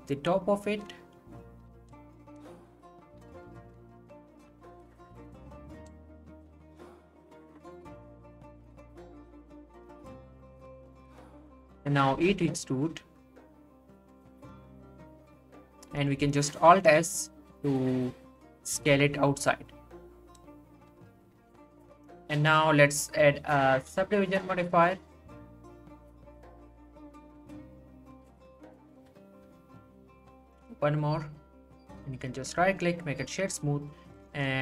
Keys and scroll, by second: 12.1 e, 16.2 alt+s, 18.9 Tab.